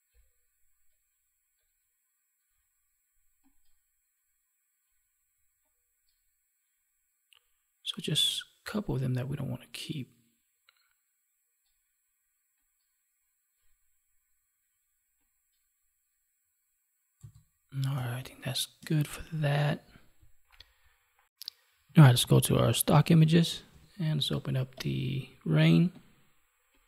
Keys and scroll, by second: 17.9 space, 22.1 alt+Tab.